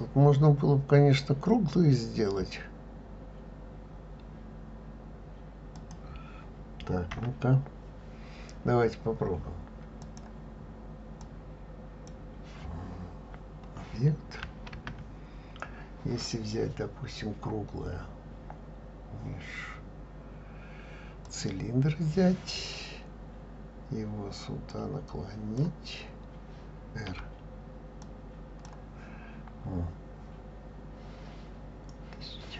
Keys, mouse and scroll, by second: 5.8-7.1 drag, 7.1 Delete, 10.0-12.1 drag, 14.7 shift+a, 24.7-27.1 drag, 27.1 r.